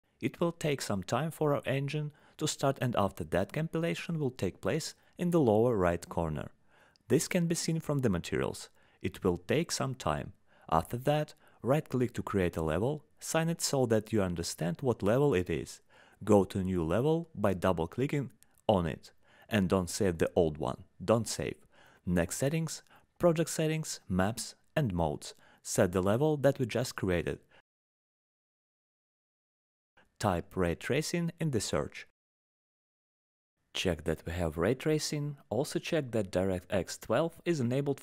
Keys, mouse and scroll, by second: 1.0 click, 12.2 right click, 13.7 click, 19.2 click, 20.9 click, 21.5 click, 23.1 click, 24.2 click, 24.9 click, 25.4 click, 25.7 click, 26.5 click, 27.5 click, 32.7 click, 37.9 click.